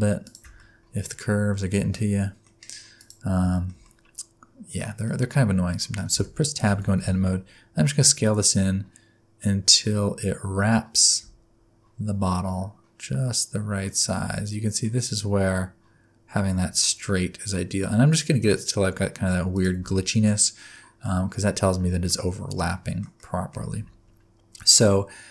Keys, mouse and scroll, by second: 0.6 middle click, 3.0 click, 3.5 shift+middle click, 3.8 middle click, 5.0 middle click, 5.8 middle click, 6.1 Tab, 6.6 a, 6.9 s, 19.9 middle click, 20.3-21.0 scroll up 5, 21.0 middle click, 22.2-22.7 scroll down 2, 22.7 middle click, 23.2 middle click, 23.7 Tab.